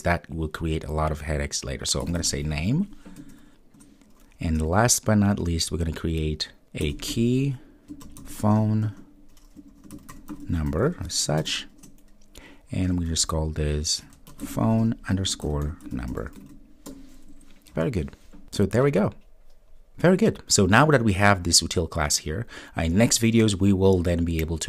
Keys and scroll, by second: 3.8 Return.